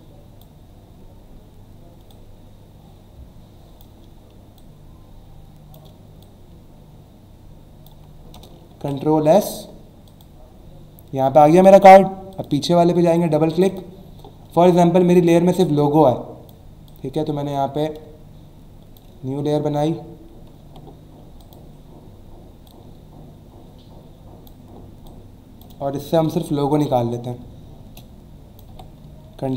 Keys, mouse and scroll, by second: 2.1 click, 4.6 shift+click, 6.2 click, 8.4 Return, 8.7 ctrl+s, 10.1 click, 12.3 click, 13.5 click, 15.6 click, 18.0 space, 20.6 v, 21.4 click, 22.7 click, 25.1 click, 26.2 m, 26.8 click, 27.4 space, 28.7 v.